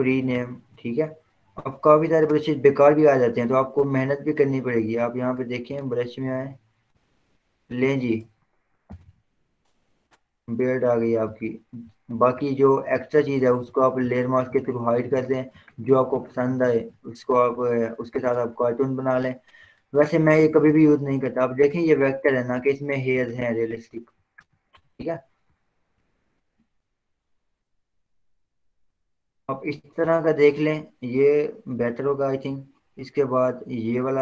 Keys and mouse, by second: 0.3 click, 5.0 click, 8.4 ctrl+z, 9.0 d, 9.2 d, 10.1 click, 13.3 ctrl+z, 14.2 click, 15.3 ctrl+z, 15.8 click, 17.0 ctrl+z, 17.9 click, 18.6 click, 20.7 ctrl+z, 21.3 click, 22.8 ctrl+z, 23.8 click, 25.6 ctrl+w, 26.1 Down, 26.4 Return, 28.5 click, 33.2-34.2 drag.